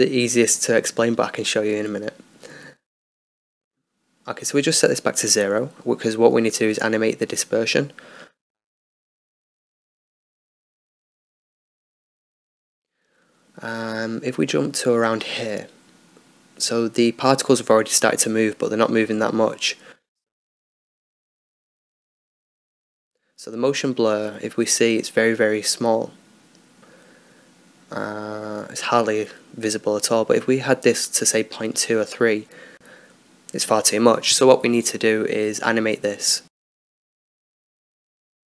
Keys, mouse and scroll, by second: 10.7 n, 13.4-14.8 scroll up 2, 14.8-17.4 drag, 17.7-21.0 middle drag, 21.4 click, 21.6 click, 28.3-34.3 drag.